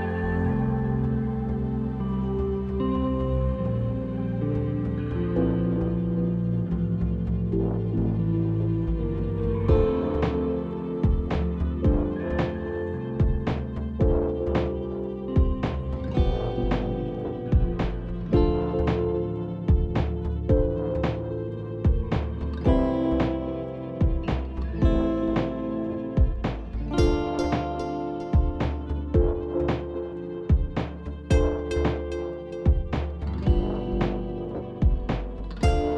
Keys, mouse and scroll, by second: 0.1 click, 0.6 click, 1.5 click, 1.8 click, 2.2 click, 2.7 click, 3.9 click, 4.3 click, 4.7 click, 7.1 click, 10.0 click, 12.3 click, 15.8 click, 16.0-16.9 scroll, 19.2 click, 19.2-19.5 scroll, 19.5 click, 19.8 click, 22.4 click, 26.3 click, 26.5-29.4 scroll, 29.4 click, 29.8 click, 35.3 click.